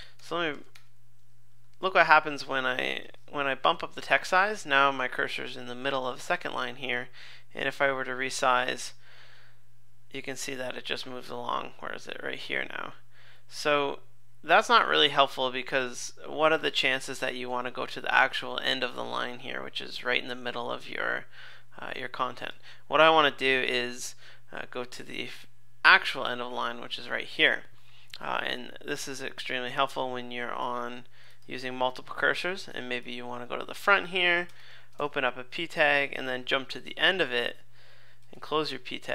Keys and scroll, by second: 0.2 super+=, 1.8 super+=, 17.1 super+Left, 33.0 super+Left, 36.9 super+Right.